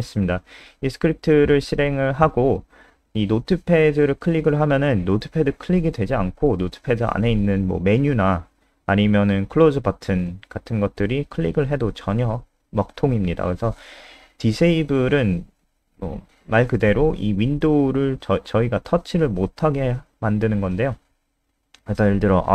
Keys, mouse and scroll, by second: 2.2 click.